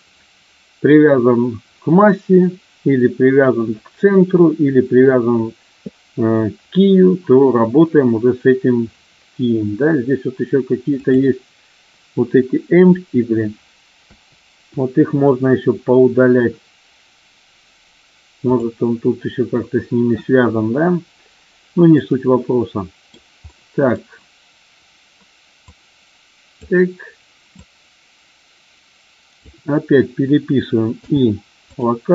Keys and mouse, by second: 14.0 Delete, 18.5 click, 22.0-23.0 middle drag, 23.4-23.8 middle drag, 25.5-26.5 drag, 27.5-29.3 drag.